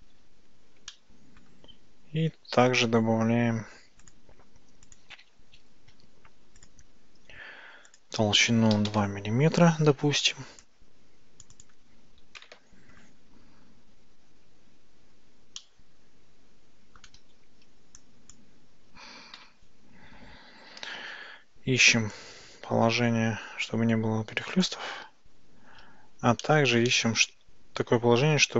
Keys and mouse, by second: 0.9-1.5 shift+middle drag, 4.1 click, 5.1-6.7 drag, 7.9-9.5 drag, 10.7 click, 11.7-13.0 drag, 15.7-17.1 ctrl+middle drag, 17.4 Tab, 18.1 click, 19.4 KP_Decimal, 20.7 Tab, 22.3-24.8 drag, 26.5-28.5 shift+middle drag.